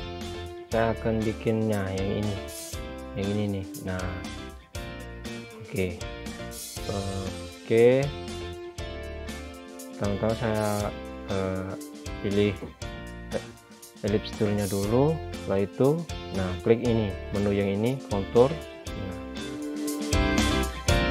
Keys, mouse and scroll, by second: 0.9 scroll up 1, 9.8 click, 10.7-11.0 scroll down 1, 11.8 scroll down 1, 12.0 scroll up 1, 12.6 click, 16.8 click, 19.0 click.